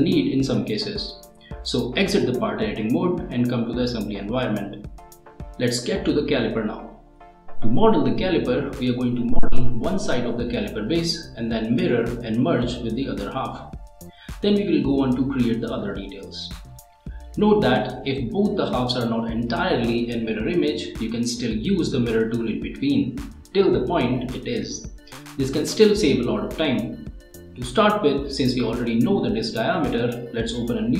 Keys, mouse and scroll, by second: 29.8 click.